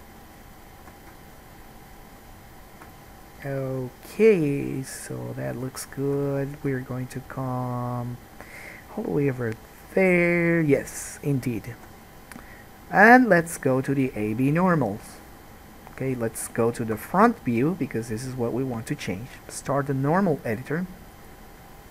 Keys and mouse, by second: 1.3 shift+right click, 1.5-3.1 shift+middle drag, 3.1-5.7 right drag, 5.7 shift+middle click, 5.8 shift+click, 6.1 shift+middle click, 6.3 click, 7.2 shift+middle click, 7.3-10.1 shift+drag, 10.1-14.1 right drag, 14.1-21.9 drag, 17.1 KP_1.